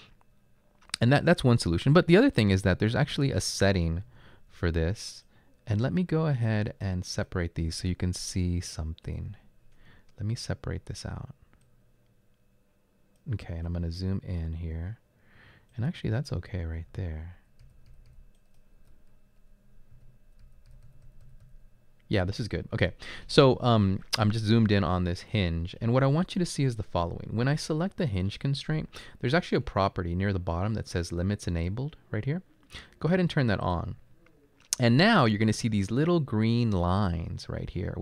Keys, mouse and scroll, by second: 0.4 typing, 4.1-4.6 typing, 6.2 typing, 11.8-13.2 drag, 14.1-14.9 middle drag, 14.1-14.9 scroll up 2, 15.7 right click, 16.8-18.8 typing, 18.4 right click, 20.0-20.4 typing.